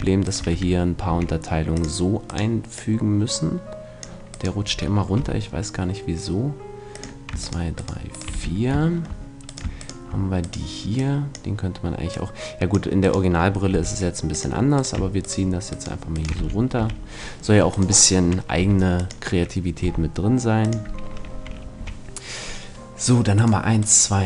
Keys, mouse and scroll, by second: 1.1 w, 5.2 g, 8.3 f, 8.9 middle click, 9.2-12.2 right drag, 11.0-12.2 drag, 12.7 click, 13.7 g, 14.0 right click, 16.4 right click, 16.4 f, 16.8 a, 18.6 g, 19.8 g, 21.8 a.